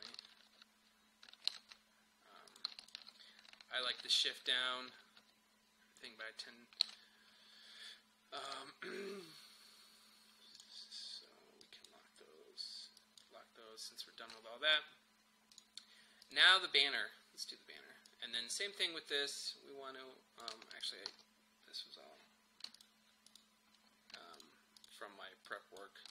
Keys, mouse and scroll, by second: 0.2 shift+Down, 2.5 click, 4.0 shift+Down, 8.4 click, 15.5-20.8 drag, 21.1 u, 22.8 alt+click.